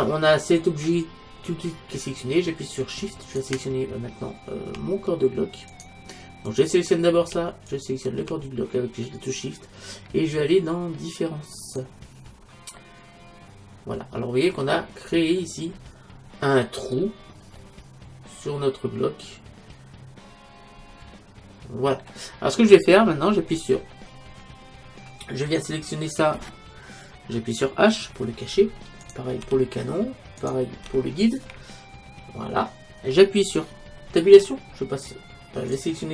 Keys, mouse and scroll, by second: 3.4-5.1 right drag, 5.8-10.1 right drag, 10.1-11.7 middle drag, 11.7-13.6 drag, 12.8 middle click, 13.6-14.6 middle drag, 15.1-19.5 middle drag, 22.4-24.9 middle drag, 25.5-27.3 right drag, 28.5 h, 29.1-31.5 right drag, 29.4 h, 30.9 h, 31.5-33.4 middle drag, 34.3 Tab.